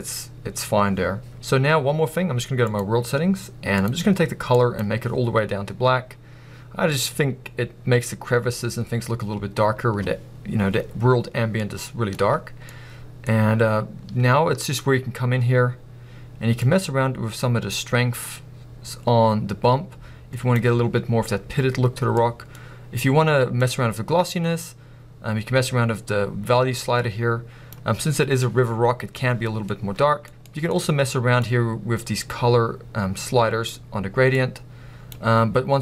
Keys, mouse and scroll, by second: 16.8-22.1 drag, 22.1-23.7 middle drag, 23.7-31.4 drag.